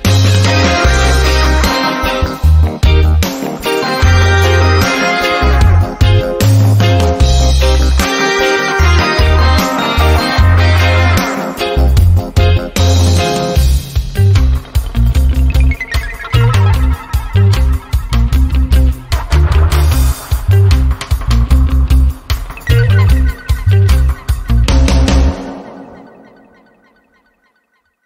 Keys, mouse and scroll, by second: 1.8 click, 2.5-3.8 typing, 5.2 click, 6.5-7.5 typing, 8.0 Return, 9.1-10.4 drag, 10.6 ctrl+scroll up 1, 11.2 ctrl+scroll down 1, 12.0-12.4 ctrl+scroll down 1, 12.4-14.8 typing, 13.5 click, 15.8 ctrl+scroll down 1, 16.4-17.0 typing, 18.5 click, 19.2 ctrl+d, 19.6-20.8 drag, 21.9-23.5 typing, 23.9-26.4 drag.